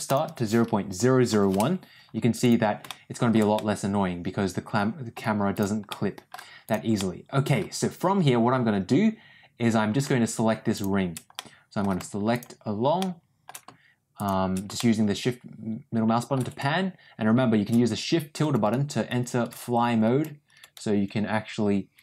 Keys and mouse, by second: 2.8 shift+middle click, 3.5-5.0 middle drag, 5.8 middle click, 6.5 click, 6.9 middle click, 11.3 middle click, 12.9 shift+middle click, 14.1 shift+click, 14.7-16.2 shift+middle drag.